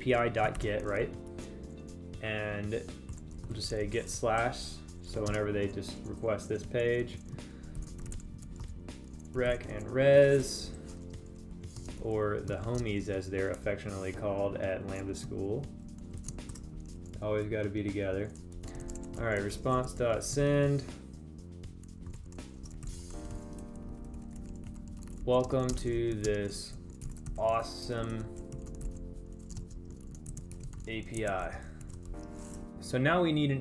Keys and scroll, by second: 5.0 Right, 5.8 space, 11.2 Right, 12.3 space, 13.4 space, 26.0 space, 26.2 space, 26.8 space, 30.1 space.